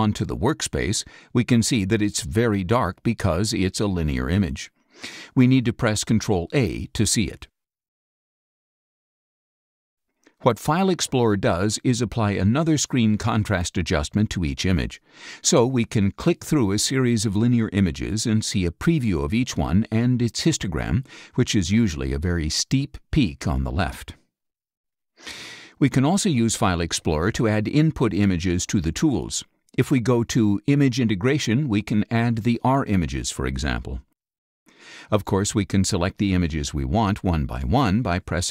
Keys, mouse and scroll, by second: 0.3 click, 6.1 ctrl+a, 7.3 click, 11.6 click, 16.1 click, 17.4 click, 18.7 click, 20.7 click, 22.1 click, 23.3 click, 26.0-26.5 scroll down 1, 26.6 scroll up 1, 26.7-27.1 scroll down 1, 28.5 click, 30.3 click, 36.4 click, 37.3 ctrl+click, 37.9 ctrl+scroll up 2.